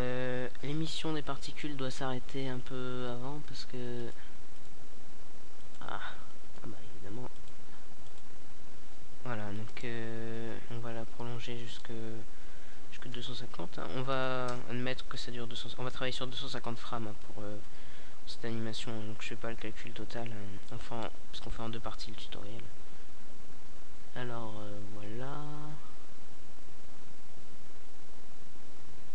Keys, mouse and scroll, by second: 2.4 click, 10.1 KP_0, 11.6 middle click, 13.1-14.1 drag, 14.3 alt+a, 24.4 alt+a.